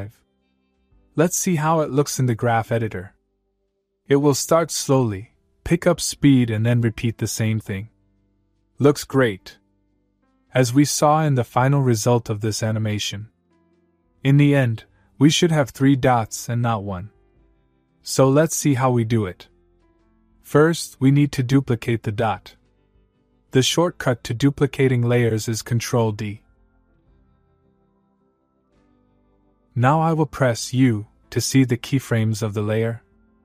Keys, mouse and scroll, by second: 3.3 click, 5.5-6.2 click, 6.2 space, 10.0-11.4 click, 13.0 click, 22.5 click, 27.4 ctrl+Num_Lock, 27.5 ctrl+d, 31.2 u.